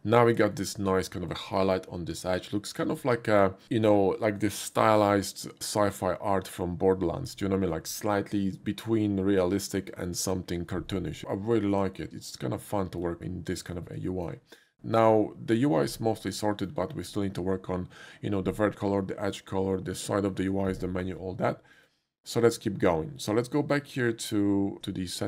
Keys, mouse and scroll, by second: 0.5 shift+middle click, 1.5 shift+middle click, 12.0 shift+middle click, 12.1 shift+middle click, 13.8 shift+middle click, 14.1 shift+middle click, 16.4 shift+middle click, 21.7 click, 23.9 click, 24.4 click.